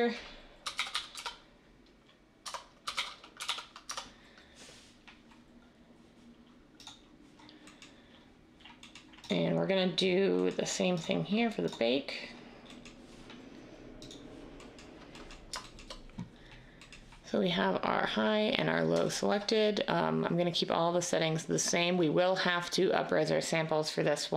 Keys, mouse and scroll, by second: 0.4-1.1 typing, 2.4 Tab, 2.6-3.8 typing.